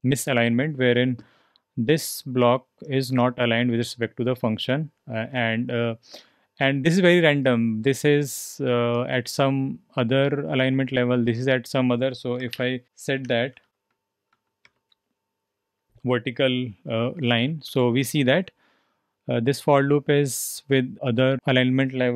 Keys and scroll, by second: 12.5-15.1 typing, 17.2 h, 17.4 h, 17.6 h.